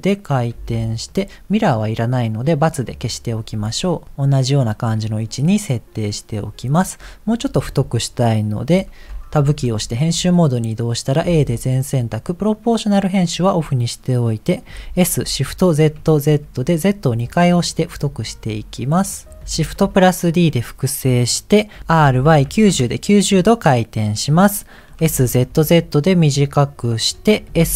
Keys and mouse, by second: 0.5 g, 2.8 click, 3.5 r, 9.5 Tab, 11.2 a, 12.5 click, 14.7 s.